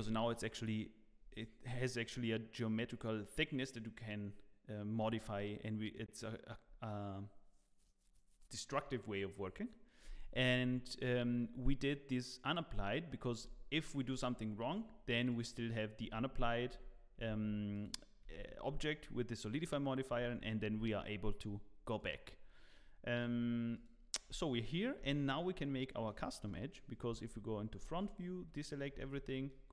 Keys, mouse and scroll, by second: 24.2 click, 24.2-24.6 scroll down 2, 24.5 click, 24.5 middle click, 24.9 Tab, 25.3 middle click, 26.5 KP_1, 27.2-27.5 scroll up 3, 27.9 alt+a, 28.5 z, 28.8-29.2 scroll up 3, 29.2 shift+middle click.